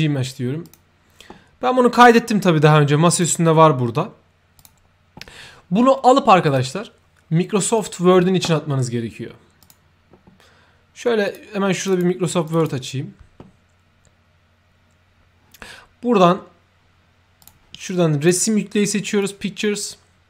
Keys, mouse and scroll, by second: 0.6 ctrl+click, 3.0 ctrl+click, 4.5 ctrl+click, 6.4 ctrl+click, 7.7 ctrl+click, 9.5 ctrl+click, 11.2 ctrl+click, 11.7 ctrl+click, 12.4 ctrl+click, 12.5 ctrl+click, 17.3 ctrl+click, 18.1 ctrl+click, 19.1 ctrl+click.